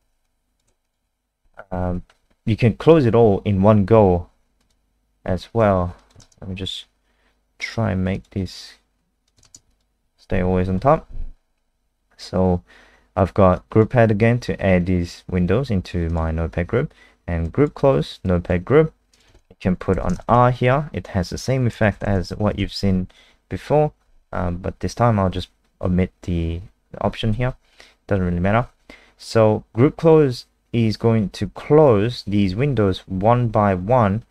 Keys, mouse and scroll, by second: 0.8 click, 6.2 ctrl+alt+space, 7.5 click, 9.4 ctrl+alt+space, 13.5 click, 19.9 ,, 20.2 r, 21.7 BackSpace, 21.9 BackSpace, 22.0 BackSpace, 22.6 ctrl+s, 30.0 click.